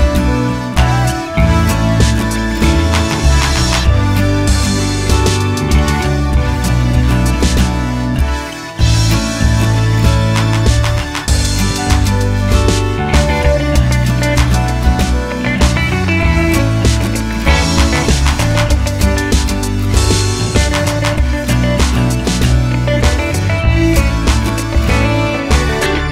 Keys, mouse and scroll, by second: 5.7 KP_1, 6.2 z, 6.9-7.2 scroll down 1, 7.2 g, 8.0 click, 10.5 scroll down 1, 10.7 Tab, 11.0-11.4 scroll up 1, 11.4 click, 12.4 g, 16.0 shift+click, 17.6 shift+a, 19.9 click, 21.1 r, 25.4 KP_Enter, 25.9 Tab.